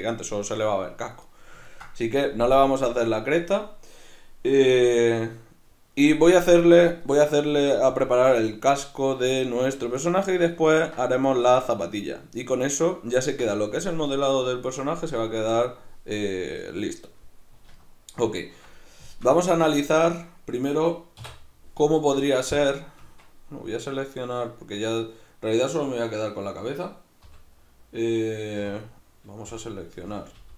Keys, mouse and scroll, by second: 17.7 alt+q, 20.1 right click, 21.2 \, 23.0 Tab, 24.8 right click, 27.2 l, 28.6 3, 28.8 right click, 29.5 l.